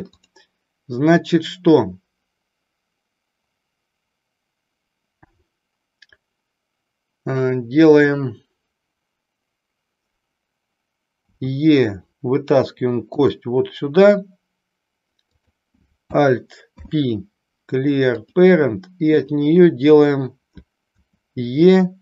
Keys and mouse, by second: 0.2 click, 13.2 click, 15.4 click, 16.7 alt+p, 19.2 click.